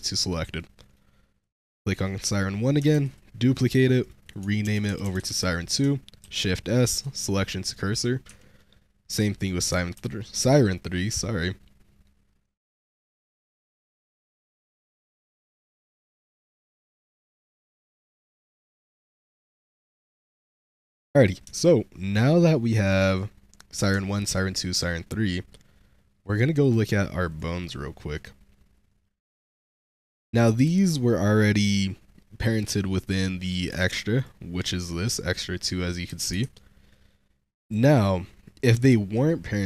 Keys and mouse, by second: 0.5 shift+middle click, 1.3 click, 1.7 Tab, 2.8 shift+d, 3.9-5.2 drag, 5.2 BackSpace, 6.1 shift+s, 7.2 shift+middle drag, 7.6 shift+middle click, 8.1 Tab, 9.2 click, 9.8 shift+s, 10.6 shift+drag, 12.5-13.0 drag, 14.3 click, 15.5 click, 15.7 Tab, 16.4 shift+d, 16.4 click, 16.7 shift+s, 17.4-20.0 drag, 18.8 BackSpace, 21.0 click, 21.4 shift+click, 24.0 shift+drag, 26.5 click, 27.2 click, 29.6 click, 33.3 click, 33.6 Tab, 36.0 h, 36.4 ctrl+z, 37.5 click, 38.8 Tab.